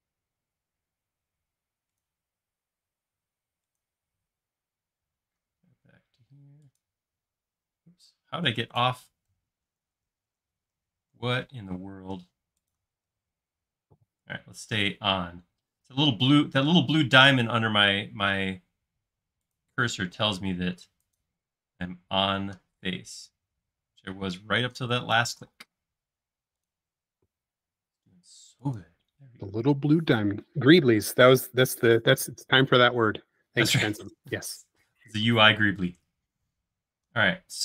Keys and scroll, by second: 7.9 e, 9.8 super+z, 10.1 super+z, 10.4 super+z, 10.8 super+z, 11.2 super+z, 11.6 l, 22.1 space, 23.1 e, 25.0-25.5 typing, 31.9 e.